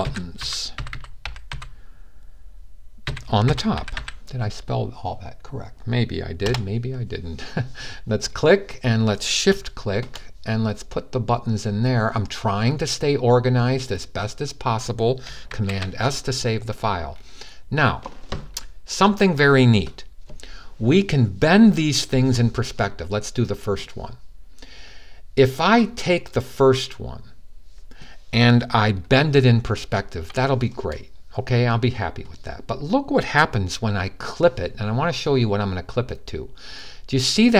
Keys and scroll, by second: 0.0-1.8 typing, 2.9-4.2 typing, 15.3 super+s.